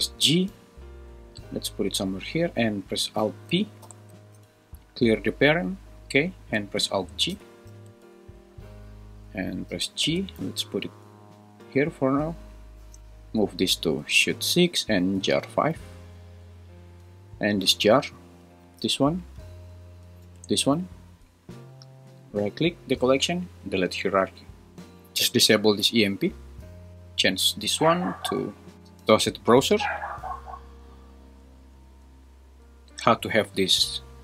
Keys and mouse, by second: 7.7 alt+g, 9.7 g, 10.1 z, 11.7 click, 13.0 super+z, 13.0 h, 13.0 m, 18.6 g, 20.2 g, 20.7 Escape, 22.6-24.3 right drag, 26.3 click, 27.1-29.5 drag.